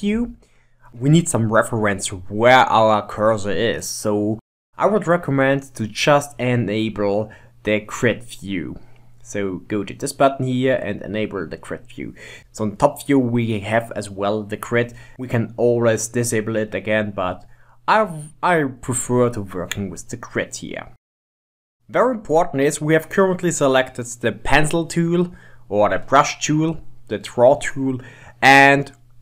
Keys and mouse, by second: 7.0-10.0 drag, 12.5 KP_7, 15.1 click, 20.2-21.8 middle drag.